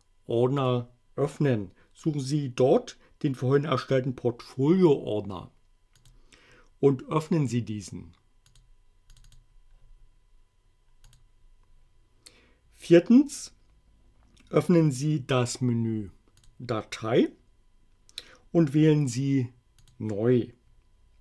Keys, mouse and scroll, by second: 0.4 click, 6.0 click, 8.5 click, 9.1 click, 11.1 click, 16.3 click, 19.8 click.